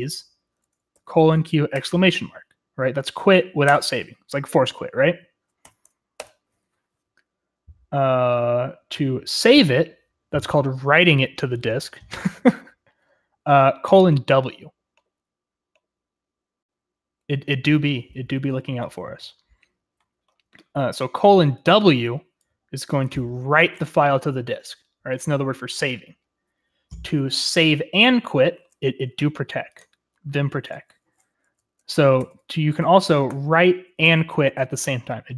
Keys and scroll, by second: 1.0-1.7 typing, 3.7 Return, 5.7 Up, 6.2 Return, 33.0-34.0 typing.